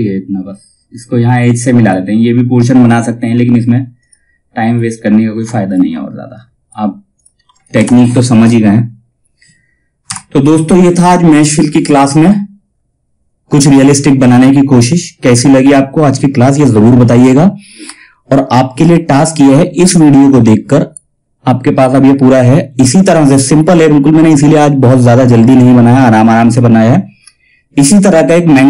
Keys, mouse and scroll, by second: 3.0-3.5 scroll down 1, 3.5 click, 7.3 shift+F2.